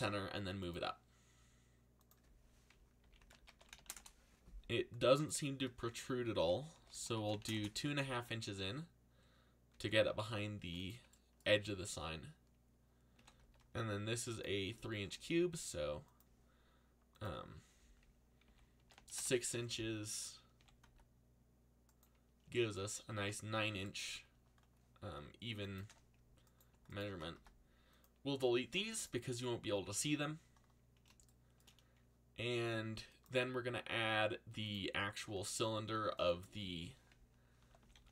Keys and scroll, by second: 2.7-4.3 typing, 6.1-7.9 typing, 9.7 c, 12.9-15.6 typing, 18.2-20.8 typing, 27.3 x, 37.3-38.1 typing.